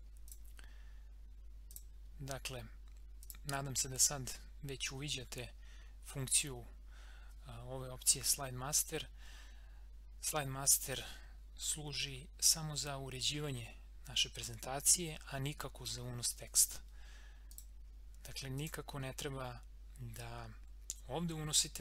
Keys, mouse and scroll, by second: 0.2 click, 4.5 scroll up 1, 7.2 scroll, 17.5 click.